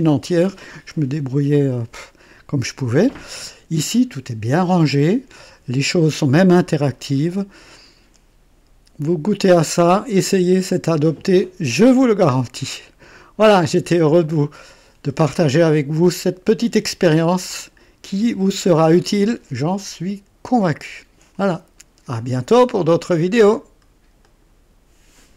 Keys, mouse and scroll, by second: 7.7-13.7 drag, 14.2-15.9 drag, 16.1-16.7 scroll up 2, 16.7-17.1 scroll down 2, 17.4-18.5 drag, 20.4-21.3 drag, 24.1 right click, 25.3 click.